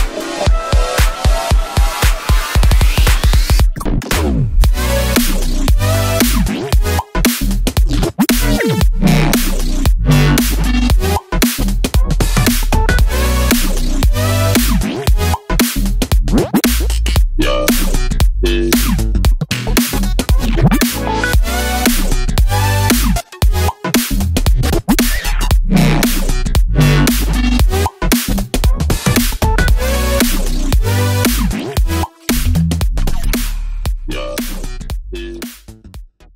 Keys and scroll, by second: 0.6 super+d, 3.5 Left, 3.6 Left, 5.4 BackSpace, 6.4 Left.